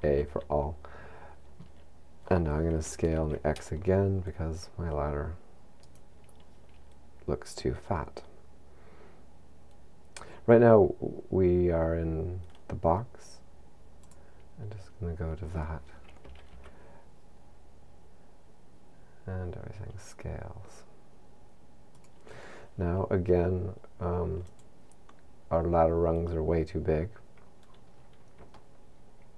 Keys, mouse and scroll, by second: 0.0 a, 2.8 s, 6.2 right click, 14.0 click, 16.2 s, 22.1 click, 24.4 click, 27.6-28.5 scroll up 4, 28.5 shift+middle click.